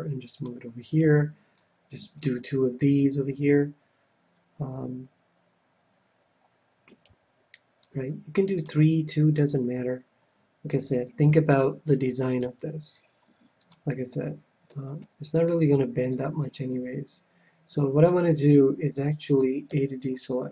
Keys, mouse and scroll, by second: 0.4-3.9 drag, 1.0 ctrl+r, 7.0 ctrl+r, 8.8-10.4 drag, 9.3 ctrl+r, 10.6 ctrl+r, 11.5-13.3 drag, 12.4 ctrl+r, 13.6-15.1 drag, 14.1-17.9 middle drag, 19.6 a.